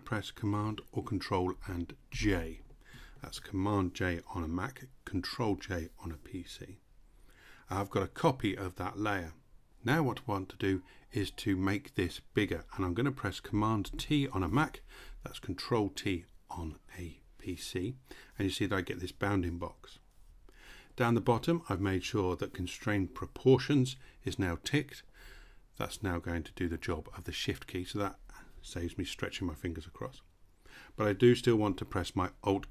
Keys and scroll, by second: 1.7 super+j, 13.4 super+t.